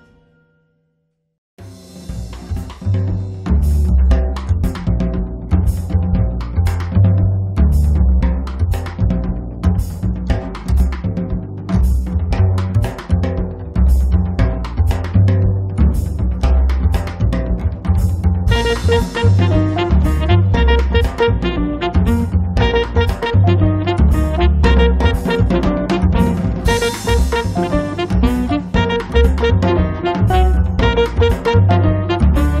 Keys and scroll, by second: 0.9 p, 2.9 3, 3.6 Return, 6.3 space, 11.7 r, 14.6-16.8 typing, 18.9 l, 20.6-21.5 typing, 22.9 Escape, 27.6 p, 32.1 1.